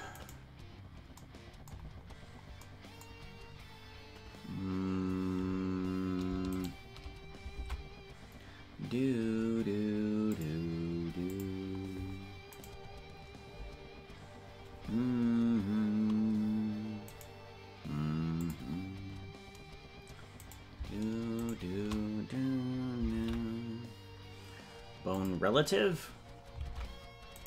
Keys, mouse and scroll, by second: 0.3 right click, 1.9 scroll up 3, 2.6 scroll up 1, 3.3 scroll down 1, 6.2 scroll down 1, 6.6 shift+right click, 7.6 ctrl+Tab, 10.3 click, 11.3 click, 12.8 right click, 18.4 click, 20.5 right click, 21.5 shift+right click, 21.7 shift+right click, 23.1 ctrl+p.